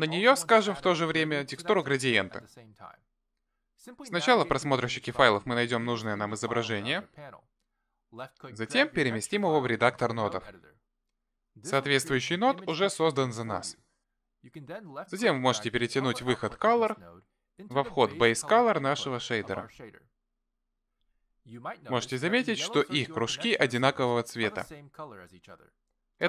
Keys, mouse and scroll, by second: 5.3 click, 6.3 click, 8.3 click, 11.8 middle click, 13.7 click, 16.0 click.